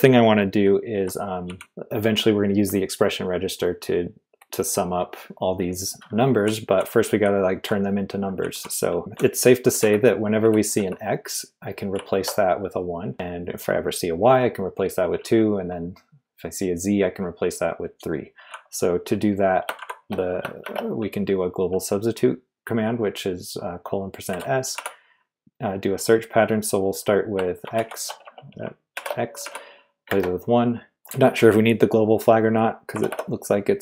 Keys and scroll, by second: 0.6-1.4 typing, 6.2-10.7 typing, 11.9-13.6 typing, 15.1 typing, 19.8 shift+;, 20.6 shift+5, 24.0-25.2 typing, 27.7-31.4 typing, 32.9 BackSpace, 33.1 BackSpace.